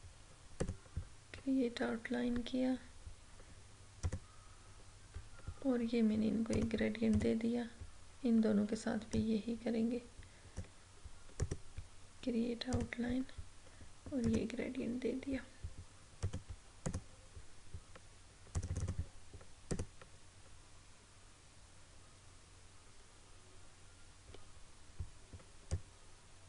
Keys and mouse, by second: 0.6 click, 4.0 click, 4.0 typing, 6.5-11.4 drag, 11.4 right click, 12.7 click, 25.8-26.4 drag.